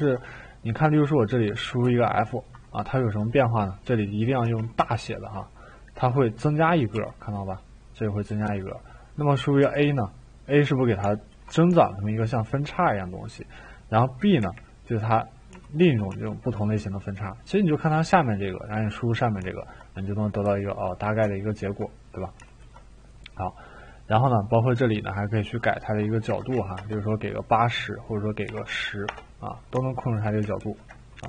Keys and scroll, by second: 0.0 Caps_Lock, 1.8 f, 4.8 f, 7.0 f, 8.3 f, 9.6 a, 20.4 f, 26.2 8, 26.8 Return, 28.4 1, 29.0-30.6 Return, 30.6 ctrl+z.